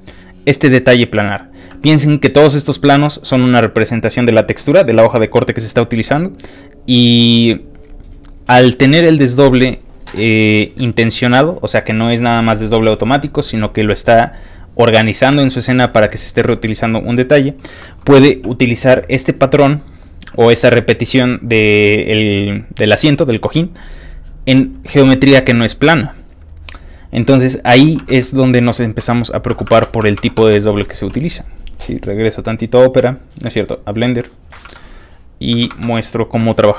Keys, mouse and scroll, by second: 1.2 scroll up 2, 1.5 scroll down 2, 2.2 ctrl+middle click, 2.3 scroll up 1, 2.4 ctrl+middle click, 3.2 ctrl+middle click, 3.3 ctrl+middle click, 6.3-10.3 ctrl+middle drag, 6.4 scroll down 1, 28.1 alt+Tab, 31.8 alt+click, 31.9 Tab, 34.0 click, 34.7 alt+Tab.